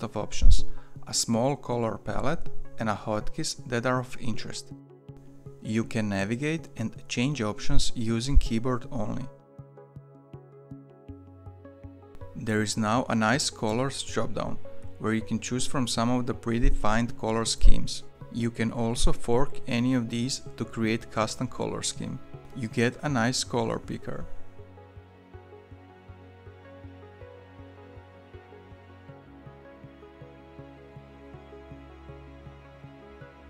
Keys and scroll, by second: 5.4 Down, 5.5 Down, 5.7 Down, 5.8 Down, 6.0 Down, 6.2 Down, 6.3 Down, 6.7 Down, 7.1 Return, 7.5 Return, 7.9 Down, 8.1 Down, 8.4 Return, 8.9 Down, 9.5 Return, 9.5 Up.